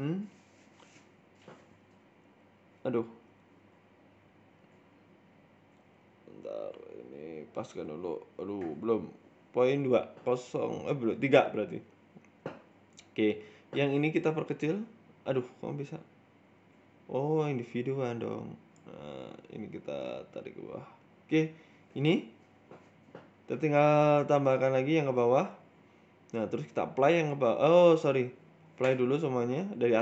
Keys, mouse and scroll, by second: 0.1 shift+middle click, 0.5 shift+middle click, 1.0-1.7 scroll up 1, 2.2 shift+click, 5.8 click, 7.6 click, 10.3 click, 12.1 Tab, 12.5 click, 13.1 click, 13.6 s, 16.3 click, 17.1 s, 19.3 click, 20.0 g, 21.4-22.3 scroll down 10, 21.5 Tab, 21.7 middle click, 22.1 middle click, 22.8 middle click, 26.7 click, 26.9-27.3 scroll up 1, 27.5-28.5 scroll up 7, 27.6 ctrl+z, 28.1 click, 28.5 click, 28.7 Tab, 29.1 scroll, 29.3 shift+middle click, 29.3 scroll down 1.